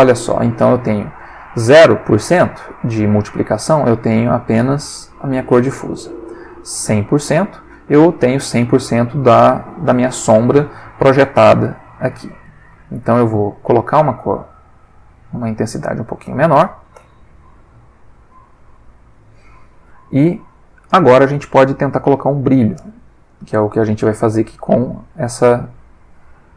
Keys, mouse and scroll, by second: 0.1-0.6 drag, 6.4-7.3 drag, 10.1 click, 12.1-12.8 drag, 13.0 click, 15.2 click, 17.8 click, 19.9-21.4 drag, 23.3 click, 25.9-26.5 drag.